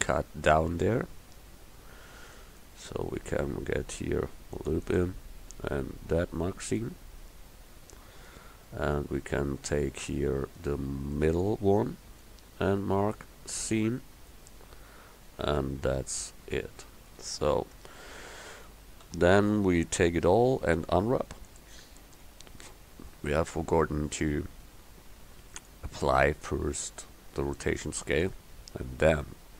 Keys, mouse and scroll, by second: 0.9-2.5 middle drag, 3.9 ctrl+r, 11.9 middle click, 13.1 click, 16.1 Tab, 17.8 Tab, 18.8 a, 19.1 a, 20.8 u, 24.3 Tab, 29.2 Tab.